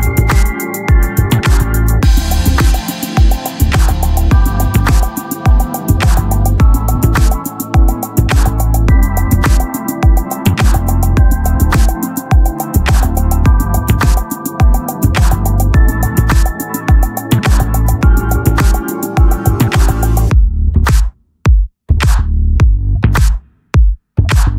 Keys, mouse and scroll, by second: 1.2-2.7 drag, 3.0 KP_1, 4.6-6.0 drag, 5.0 r, 6.3 right click, 6.6 middle click, 8.6-11.8 drag, 13.8-22.9 drag, 22.9-24.1 middle drag.